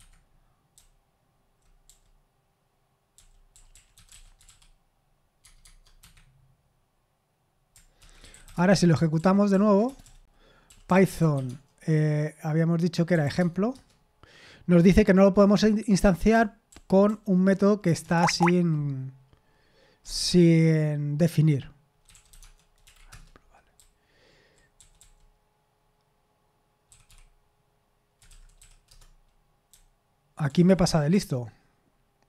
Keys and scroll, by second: 10.7-11.8 typing.